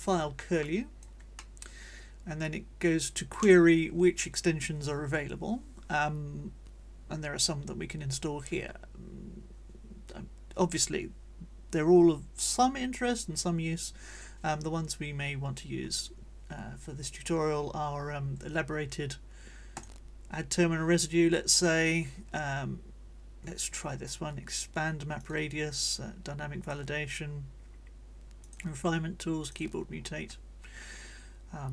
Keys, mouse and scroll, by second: 0.6 click, 1.4-3.5 drag, 3.5-19.8 middle drag, 25.2 click, 26.6 click, 28.4 click, 29.5 click.